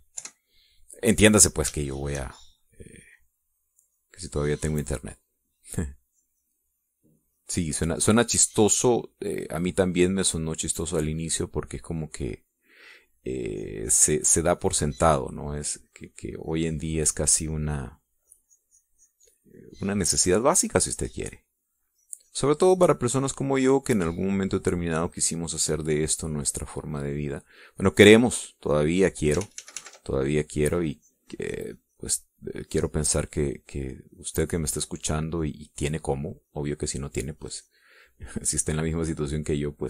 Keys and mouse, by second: 0.3 middle click, 0.7-1.7 drag, 1.8 KP_5, 2.3 click, 3.4 shift+click, 5.3 click, 6.8-13.0 drag, 13.2-14.6 drag, 15.1-23.1 drag, 23.3-31.0 drag, 31.1 ctrl+z, 32.1-39.8 drag.